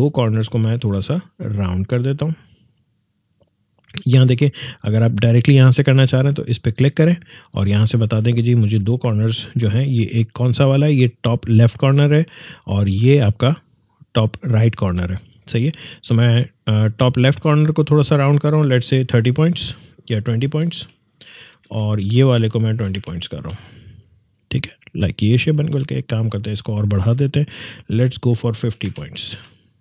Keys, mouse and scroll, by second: 1.6-2.7 scroll down 1, 2.7 click, 17.3-20.3 drag, 20.3-20.7 typing, 21.3 Tab, 22.6 typing, 23.3 Tab, 26.4 click, 28.6 typing, 29.2 Tab.